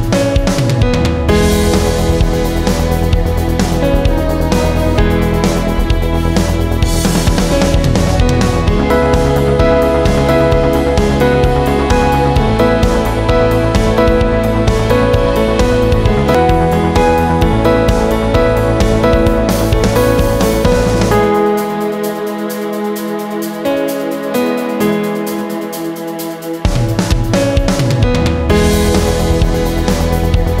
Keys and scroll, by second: 15.1-18.2 typing, 19.5-20.6 typing.